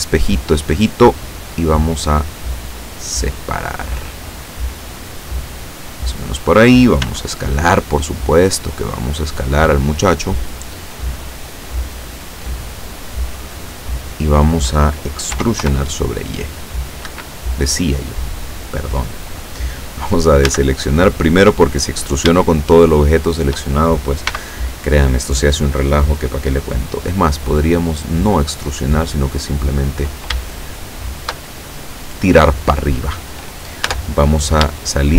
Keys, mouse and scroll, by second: 1.2 click, 2.5-6.5 drag, 7.1 s, 9.9 click, 10.7-12.1 drag, 12.1 middle click, 12.5-14.0 drag, 15.4 e, 15.7 y, 17.1 Escape, 20.5 a, 21.2-21.9 scroll up 4, 22.5-23.7 shift+drag, 24.3 b, 24.6 click, 27.4-30.1 drag, 30.5-31.5 shift+middle drag, 33.9 Tab, 34.9-35.1 shift+middle drag.